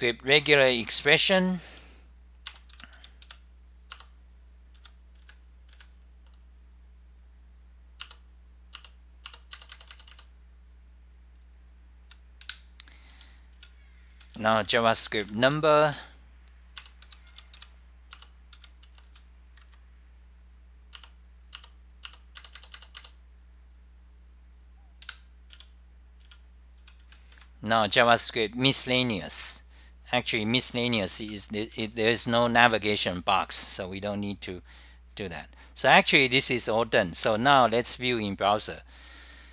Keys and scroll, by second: 0.0-3.5 typing, 4.0 Return, 4.7-6.1 typing, 7.9-8.6 typing, 8.8 Return, 9.5 Return, 11.1-17.7 typing, 13.2 Right, 18.3 Up, 18.3 Return, 18.7 Home, 19.4-20.1 typing, 21.1 Return, 21.6 Return, 22.2 Return, 22.4-23.1 typing, 25.2 super+w, 25.3-29.0 typing, 31.0 ctrl+g, 31.4 d, 31.8 d, 36.6-37.3 typing.